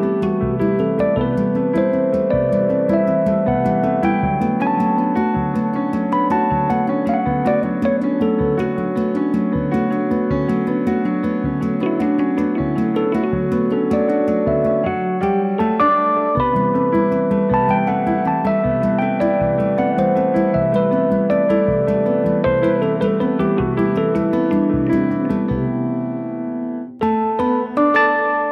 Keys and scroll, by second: 0.7 m, 2.1 space, 2.2 Escape, 8.7 space, 8.8 Escape, 10.7 m, 13.5 space.